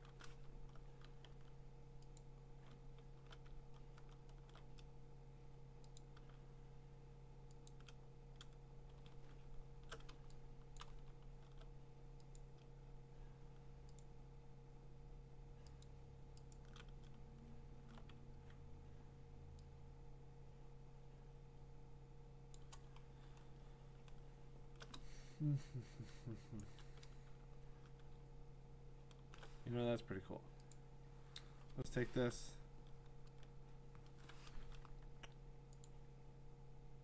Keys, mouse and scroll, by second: 0.5 scroll, 1.3 x, 2.2 click, 2.7-3.5 ctrl+scroll, 3.5-5.7 scroll, 6.0 click, 7.5 scroll down 8, 7.7 shift+click, 9.0-9.6 alt+scroll down 8, 9.6 scroll, 10.8 click, 11.1 scroll, 14.0 shift+click, 15.8 click, 16.5 click, 17.2-18.3 scroll, 18.3 x, 22.5 click, 23.0-24.6 scroll, 26.6 click, 27.1 q, 28.3 scroll, 30.7 click, 33.4 click, 34.8 click, 35.8 click.